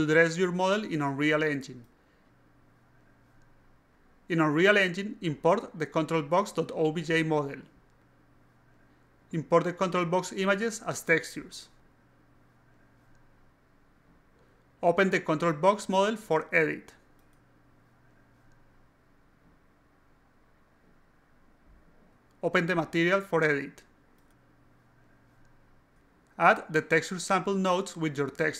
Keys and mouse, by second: 4.0 click, 5.0 click, 5.1 click, 6.0 click, 9.5 click, 12.3 click, 12.7 shift+click, 13.3 click, 16.8 click, 18.7 click, 20.2 click, 24.7 click, 25.5 click, 26.7 click, 26.9-27.9 typing.